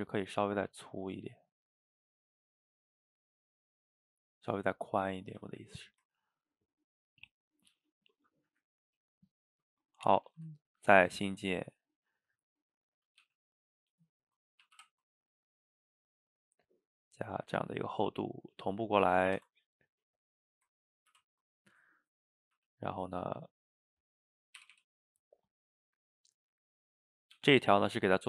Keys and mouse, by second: 2.6 click, 2.8 middle click, 3.8-5.4 shift+drag, 5.4 a, 5.5 a, 5.7-9.3 middle drag, 9.3 shift+right click, 10.3 shift+a, 12.8-13.3 middle drag, 13.3 g, 14.8 ctrl+v, 15.6-16.6 middle drag, 16.6-18.4 shift+drag, 19.3 ctrl+c, 20.2 click, 21.2 ctrl+v, 21.8-22.6 middle drag, 22.6 g, 23.2-24.6 middle drag, 24.6 r, 26.4 middle click, 27.4 g.